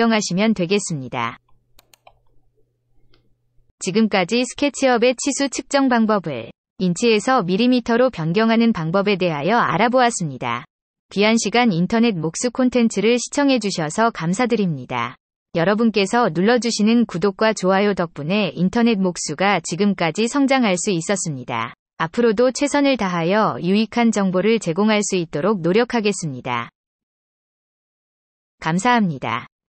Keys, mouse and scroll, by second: 1.7 click.